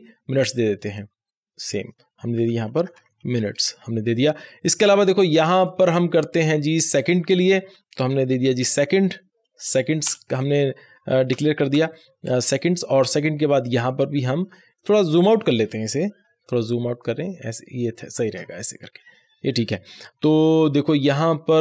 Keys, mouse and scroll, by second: 0.9-2.3 drag, 2.1-4.2 typing, 5.6-7.9 drag, 7.8-9.1 typing, 9.7 Return, 11.3 BackSpace, 13.6-15.2 drag, 16.4 ctrl+scroll down 1, 18.9-20.7 scroll up 1.